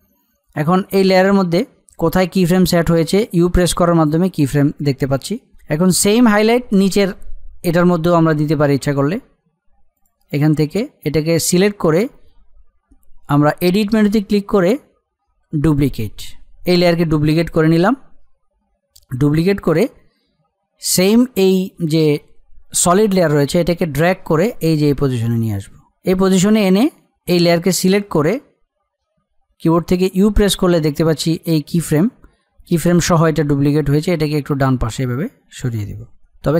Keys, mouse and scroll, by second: 3.4 u, 5.5 click, 9.9 click, 13.8 click, 23.7-27.0 drag, 30.0 u, 33.8-36.5 drag.